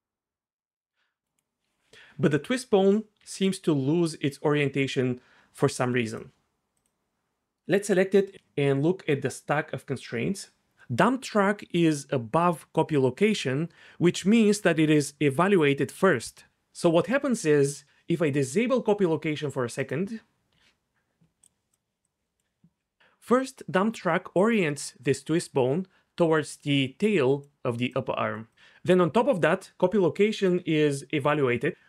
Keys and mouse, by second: 1.2 g, 3.2 g, 6.1 click, 19.8 click, 21.4 click, 21.7 click, 22.1-22.4 drag, 27.9 click.